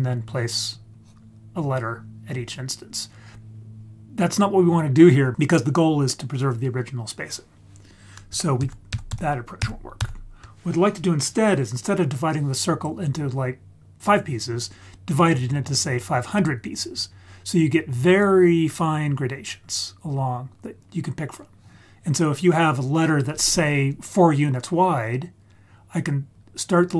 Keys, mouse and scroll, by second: 0.9 click, 8.6 ctrl+z, 8.9 ctrl+z, 9.1 ctrl+z, 9.6 ctrl+z, 10.0 ctrl+z, 15.6 click, 15.9 click, 16.4 click, 18.1 click, 18.6 click, 19.1 click, 19.6 click, 20.1 click, 20.6 click, 21.2 click, 26.4 click.